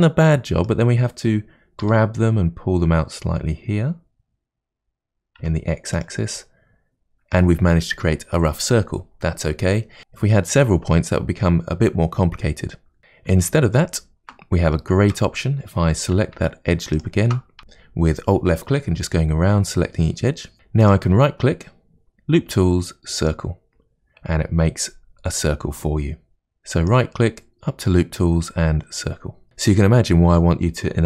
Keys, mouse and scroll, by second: 1.8 g, 6.4-9.4 middle drag, 11.7 scroll down 1, 13.5 ctrl+z, 13.8 ctrl+z, 14.7-15.9 shift+middle drag, 15.9 2, 16.9 alt+click, 17.7 alt+shift+click, 17.8 alt+shift+click, 20.9-29.5 right drag.